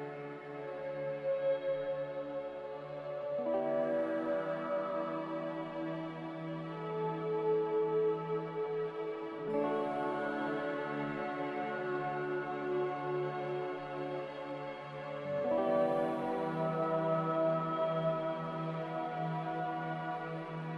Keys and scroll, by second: 0.3 n, 12.0 a, 13.8 q.